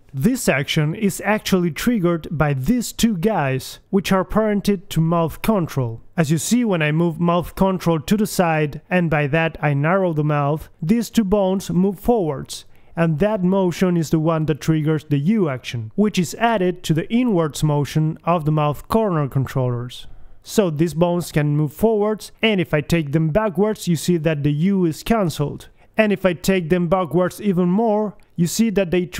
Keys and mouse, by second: 0.1-2.1 middle drag, 2.3-5.4 middle drag, 6.2-7.8 drag, 7.8-10.0 middle drag, 10.6-11.7 middle drag, 11.3 g, 11.7-13.8 drag, 14.4 right click, 15.1-16.9 drag, 16.9 KP_1, 21.4 middle click, 21.8-23.2 drag.